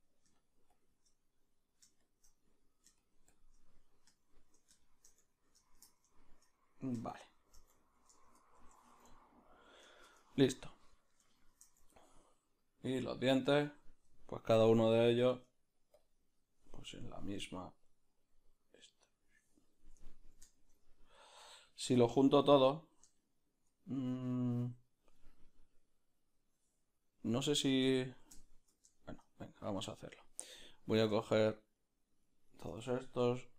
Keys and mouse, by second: 4.2-7.1 shift+middle drag, 7.1 shift+click, 7.8-12.6 ctrl+middle drag, 8.8 Tab, 12.6-16.0 right drag, 16.0 Tab, 16.0 b, 19.1-20.1 drag, 20.1-22.3 ctrl+middle drag, 21.4 Tab, 22.3-26.3 right drag, 26.3-28.0 drag, 28.0-29.8 ctrl+middle drag, 29.8-33.5 right drag.